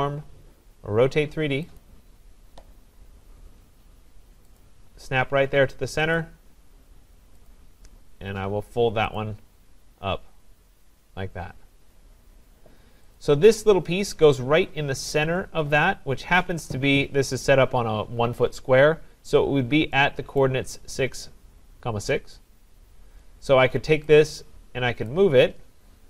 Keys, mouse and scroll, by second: 1.8 click, 3.0 scroll, 4.6 click, 5.0 scroll, 6.2 click, 7.5 click, 7.9 scroll, 9.2 click, 9.9-10.2 scroll, 11.6-12.5 scroll, 12.5 middle click, 12.6 scroll, 13.2 click, 13.9-15.1 scroll, 20.4 right click, 20.8-21.6 scroll, 22.8-25.0 scroll, 25.0 click, 25.9-26.0 typing.